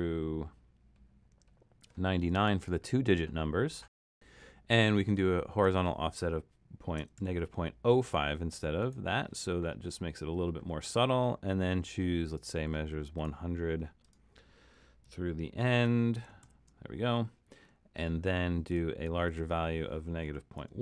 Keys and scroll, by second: 6.8-7.7 typing, 16.5 alt+shift+super+?, 20.3 BackSpace, 20.6 BackSpace.